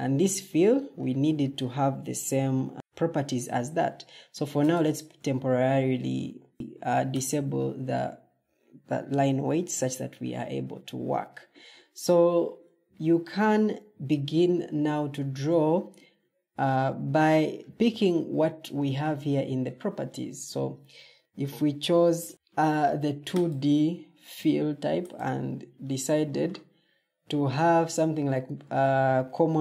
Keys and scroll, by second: 6.5 Escape.